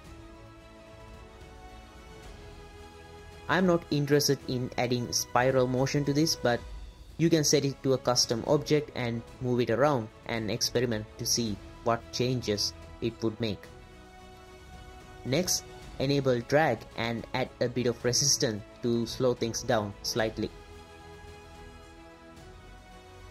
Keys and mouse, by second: 1.1-2.9 middle drag, 3.6 click, 4.9 click, 6.5 click, 7.2 middle drag, 7.7 middle click, 9.4-9.9 middle drag, 10.4 space, 10.9 drag, 12.5 drag, 13.3 click, 13.5 space, 14.0 space, 14.1 drag, 14.7-15.2 drag, 16.2 space, 17.7 click, 19.9 middle click, 20.7 middle click, 21.8 click.